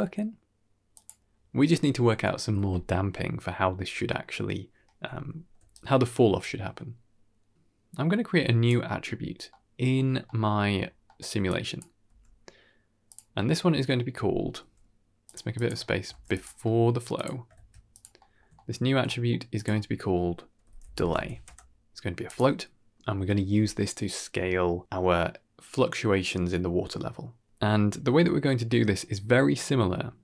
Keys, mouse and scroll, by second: 3.7-4.4 scroll down 2, 4.0 middle click, 4.7 middle click, 5.1 scroll down 1, 5.4 d, 5.6 right click, 6.6-8.6 drag, 9.0-9.3 scroll down 3, 9.4 middle click, 10.0 scroll down 1, 10.1-10.6 middle drag, 10.7-11.1 scroll down 2, 10.9 middle click, 11.4-11.7 drag, 11.9 g, 13.2 middle click, 15.1 g, 15.4 click, 15.7 shift+middle click, 16.0 g, 16.5 middle click, 17.0 click, 17.4 shift+d, 18.1 middle click, 18.4-18.8 ctrl+middle drag, 18.9 middle click, 19.4 click, 22.1 click.